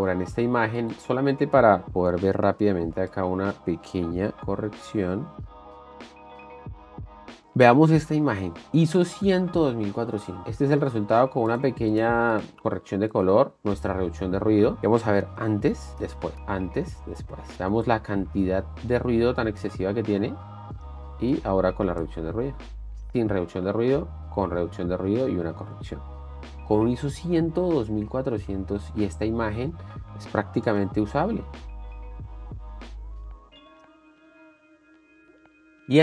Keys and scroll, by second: 0.6 alt+s, 3.7 alt+s, 5.9 alt+s, 15.9 shift+d, 16.6 shift+d, 18.3 d, 20.1 space, 21.2 space, 22.0 shift+d, 22.1 space, 23.7 shift+d, 25.9 space, 26.6 space, 31.1 space, 34.7 shift+f, 35.8 shift+d.